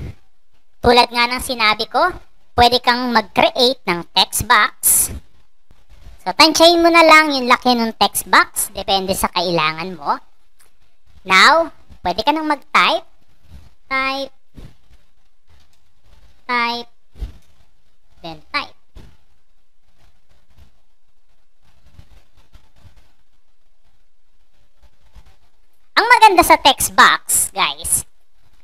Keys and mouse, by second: 3.5-8.0 drag, 12.2 click, 13.3-19.7 typing.